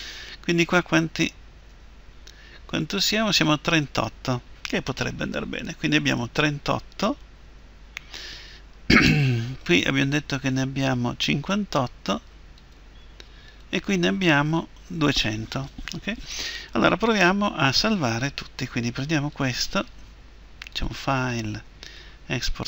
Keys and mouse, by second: 0.0 Tab, 1.7 Tab, 7.4 Tab, 8.4-14.2 right drag, 10.1 Tab, 13.0 Tab, 14.2 Tab, 18.4 Tab, 19.3-21.6 right drag, 20.7-21.8 drag, 21.9 click.